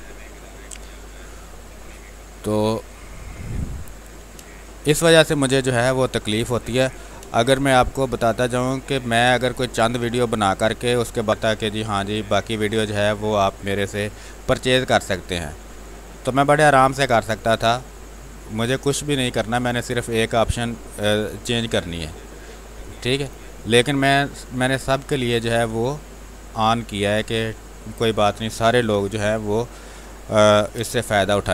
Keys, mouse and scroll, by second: 1.8 r, 2.2-4.1 drag, 4.3 space, 4.5 click, 4.8 space, 5.6 r, 5.8 click, 7.7 space, 8.3 click, 8.3 space, 9.5-11.2 drag, 11.2 space, 13.2-23.2 drag, 23.2 x, 25.2-27.2 drag, 27.9 space, 28.8 r, 29.0-31.2 drag, 31.2 space.